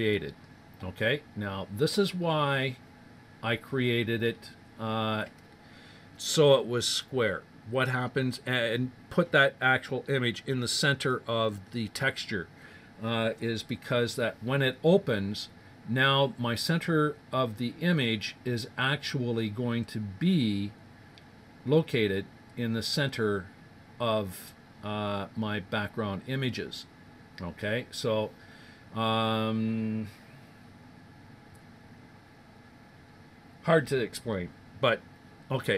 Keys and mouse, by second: 0.0-1.8 drag, 1.8-6.4 middle drag, 19.7 middle click, 20.0 middle click, 20.9-22.1 middle drag, 24.7-30.2 middle drag.